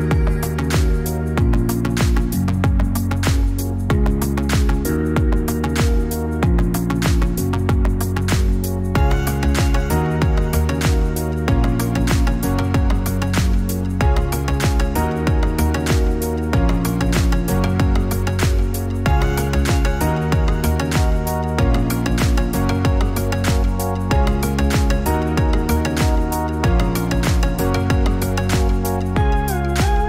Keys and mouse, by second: 7.9-25.2 drag, 27.7 click.